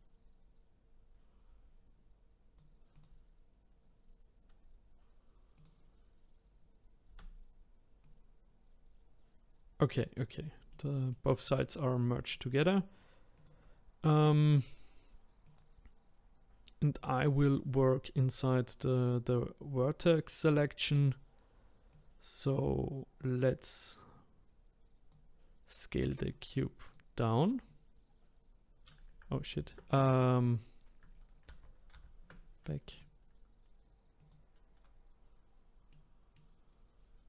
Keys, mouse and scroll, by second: 2.9 click, 5.5 click, 7.1 a, 8.0 click, 10.7-12.3 middle drag, 12.3-13.4 drag, 15.4 click, 20.4 click, 21.9 click, 26.3 click, 27.6 click, 29.6 ctrl+z, 31.5 ctrl+z, 31.9 ctrl+z, 32.9 click, 34.2-35.9 drag, 35.9 middle click, 36.7-37.2 scroll down 3.